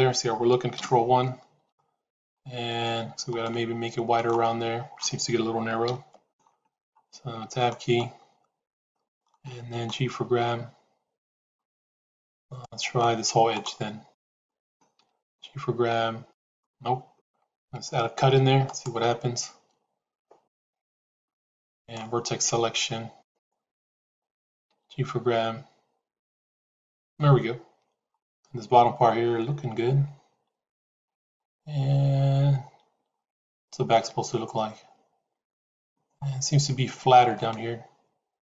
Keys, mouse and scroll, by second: 0.6 ctrl+KP_1, 3.3 middle click, 5.8 ctrl+KP_1, 7.4 Tab, 8.6 click, 9.6 g, 12.2 click, 13.6 click, 15.1 g, 17.8 ctrl+r, 24.6 g, 30.1 Tab, 37.2-38.4 shift+middle drag.